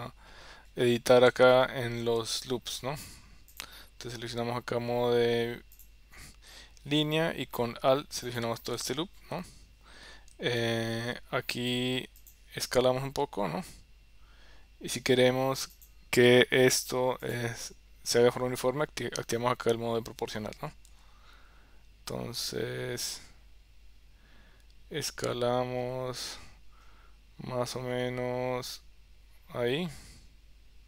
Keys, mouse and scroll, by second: 1.6 shift+middle click, 3.6 click, 5.8 click, 8.3 alt+click, 9.4 KP_7, 10.6 middle click, 12.3 click, 13.3 s, 17.3 click, 20.9 s.